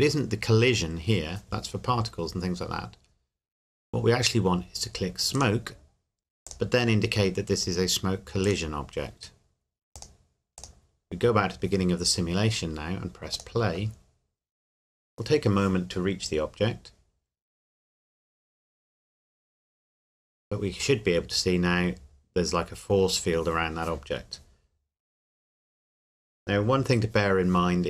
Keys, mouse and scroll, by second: 5.4 click, 13.3 click, 18.8 scroll up 1.